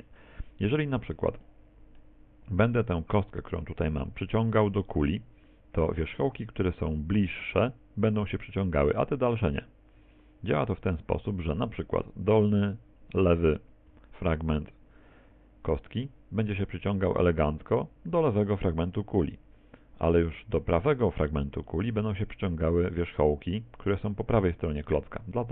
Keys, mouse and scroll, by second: 1.5 middle click, 2.6 right click, 13.9 g.